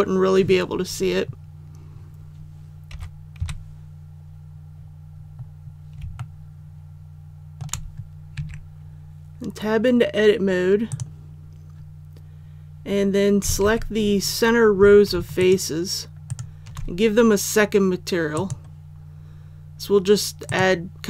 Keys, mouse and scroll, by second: 2.8 KP_5, 3.3 KP_1, 4.6-5.9 scroll up 1, 6.1-7.5 shift+middle drag, 8.3 Tab, 10.8 click, 13.5 alt+a, 15.3 alt+shift+right click, 18.3-21.0 drag.